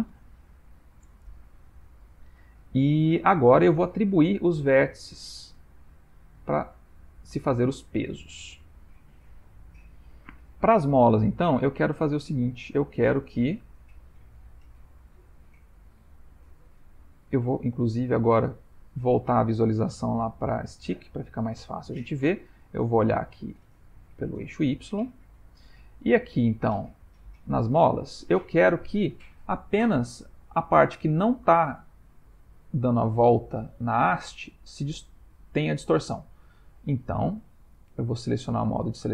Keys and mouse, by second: 3.3 middle click, 9.3 ctrl+middle click, 10.2 middle click, 11.5 ctrl+middle click, 12.0 shift+middle click, 12.7 middle click, 13.5 middle click, 14.5 shift+middle click, 14.9 Tab, 15.8 middle click, 17.1 Tab, 17.7 click, 19.8 click, 21.5 middle click, 23.4 click, 24.6 ctrl+middle click, 25.1 shift+middle click, 25.7 ctrl+middle click, 26.6 click, 27.8 Tab, 38.6 1.